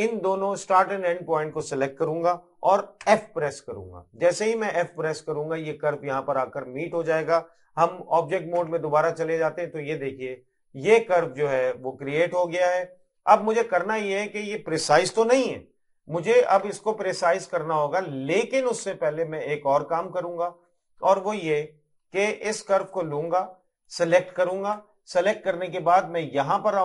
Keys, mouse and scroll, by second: 14.3 scroll up 1, 15.5 middle click, 18.0 middle click, 19.1-21.3 scroll down 1, 21.7 middle click, 23.9 click.